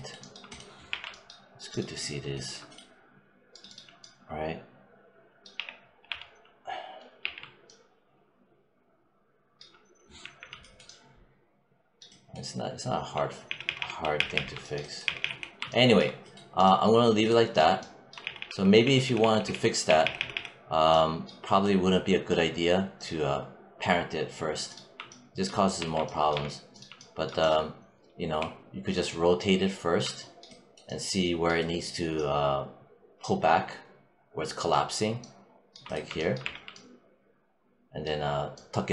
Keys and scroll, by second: 0.7 4, 5.4 w, 5.9 e, 7.1 r, 10.0 5, 13.3 z, 14.9 z, 18.0 z, 25.6 1, 26.1 3, 28.2 e, 36.3 4.